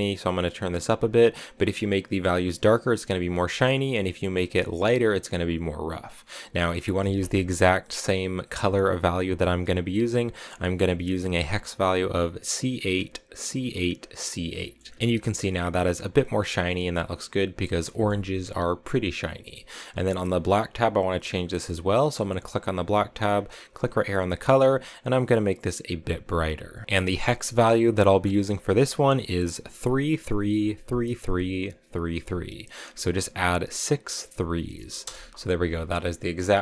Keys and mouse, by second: 6.4-10.9 middle drag, 14.5 click, 17.8 middle click, 19.5 middle click, 21.1 click, 21.3 click, 23.8 click, 30.1 3, 32.1 3.